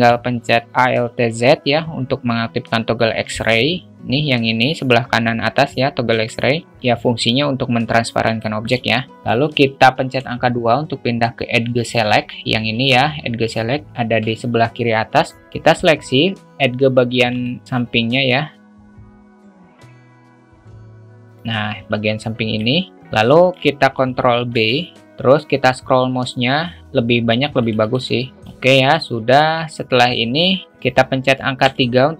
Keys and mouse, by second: 1.1 alt+z, 3.4 a, 8.4 alt+shift+middle click, 9.1 alt+shift+middle click, 15.7-17.0 drag, 17.4 alt+shift+middle click, 18.0 shift+click, 19.0 alt+shift+middle click, 19.2 shift+middle click, 19.9 shift+click, 20.5 shift+click, 21.0-22.5 middle drag, 23.2 alt+shift+middle drag, 24.5 ctrl+b, 27.7 click, 28.1 alt+middle drag, 28.4 Tab, 28.4 alt+z, 28.4 `, 29.4 Tab, 30.7 a, 31.6 3.